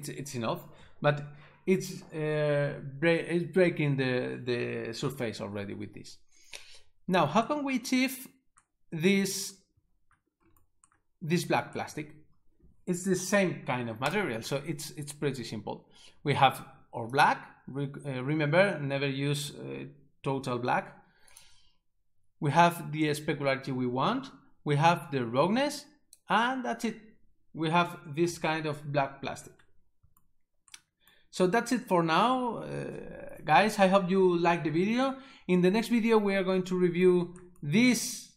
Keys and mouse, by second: 14.1 right click, 17.1 click, 21.3 click, 25.9 click.